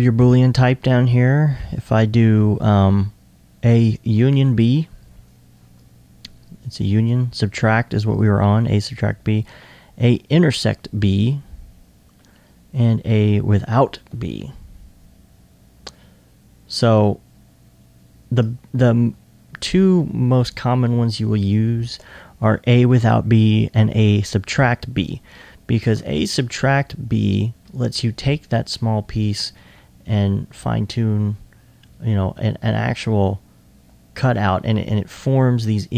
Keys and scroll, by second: 18.8 1.